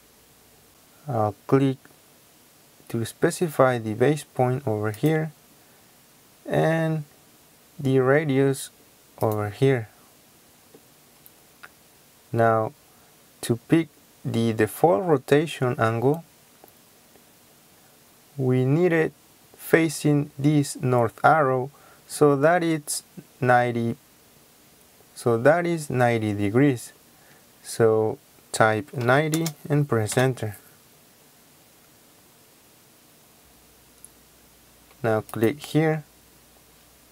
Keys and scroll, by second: 29.0 KP_9, 29.3 KP_0, 30.1 Return.